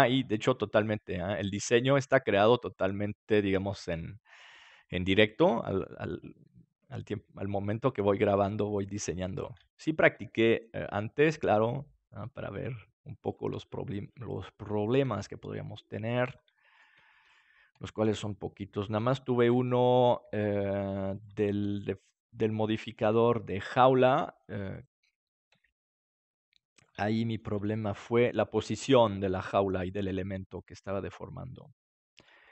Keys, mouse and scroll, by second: 1.5-4.1 drag, 4.0 middle click, 4.1 right click, 4.1 g, 5.6-6.7 drag, 5.8 middle click, 7.4 click, 7.8 g, 9.3-11.3 drag, 10.5-12.7 right drag, 11.3 g, 13.2 click, 15.0 g, 17.7 g, 19.8 click, 19.8 middle click, 19.8-21.7 right drag, 20.2 g, 21.3-23.0 drag, 22.3 right click, 23.0 g, 23.2 right click, 24.2 click, 25.6 g, 25.8 right click, 27.1 click, 27.3-29.1 right drag, 27.7-28.8 drag, 28.1 g, 28.5 middle click, 29.4-31.3 drag, 30.4-31.4 right drag, 30.8 g, 31.5 right click, 32.1-32.5 drag.